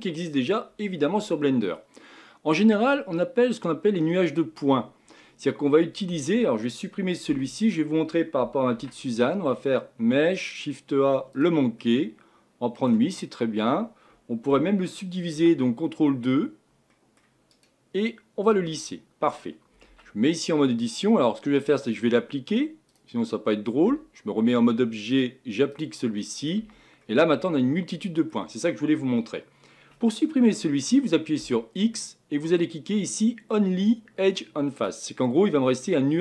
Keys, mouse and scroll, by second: 2.1-4.3 middle drag, 4.3-5.2 scroll up 4, 5.2-7.3 scroll down 1, 7.3 x, 8.7 shift+a, 11.8-13.1 middle drag, 13.1-16.0 scroll up 5, 16.2 ctrl+2, 16.9-17.5 middle drag, 17.5-18.8 right drag, 18.8-19.9 middle drag, 19.9 Tab, 20.2 middle click, 20.8 scroll up 1, 21.8 click, 22.9-23.9 drag, 23.9 Tab, 25.1-26.2 drag, 26.2 middle click, 26.6 Tab, 27.0-29.1 middle drag, 29.1-31.4 scroll up 4, 31.4 x, 35.3 middle click, 36.1-36.2 scroll down 3.